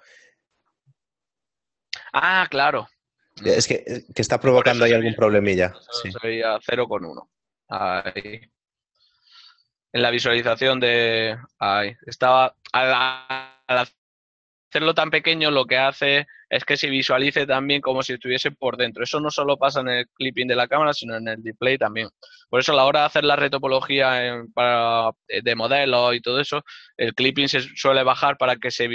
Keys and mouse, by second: 0.0 y, 6.1 Tab, 8.4 KP_1, 8.5 Return, 8.5 KP_Enter, 10.2 right click, 10.3 Tab, 15.3 click.